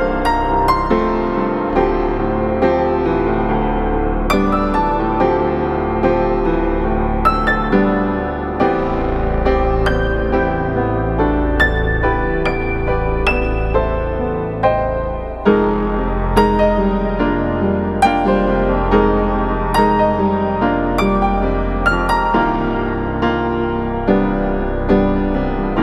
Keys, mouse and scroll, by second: 5.2 right click, 5.6 click, 8.8 scroll down 1, 9.0 scroll up 1, 9.1 right click, 9.5-9.8 scroll up 1, 9.8 right click, 11.1 click, 11.3 right click, 11.6 click, 23.7 right click, 24.2-25.8 drag.